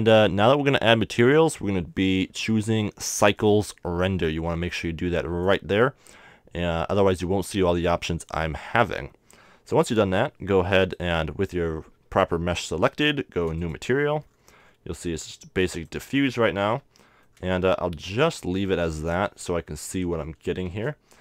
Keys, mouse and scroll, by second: 3.4-5.3 drag, 10.8-12.6 right drag, 12.6 middle click, 13.6-17.3 drag, 16.6 n, 17.1-19.3 middle drag, 18.0-19.8 drag, 20.6 shift+a.